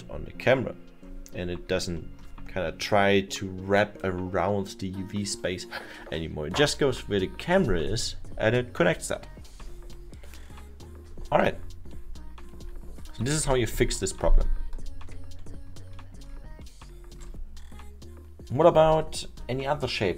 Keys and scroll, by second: 14.4 ctrl+z, 14.8 ctrl+z.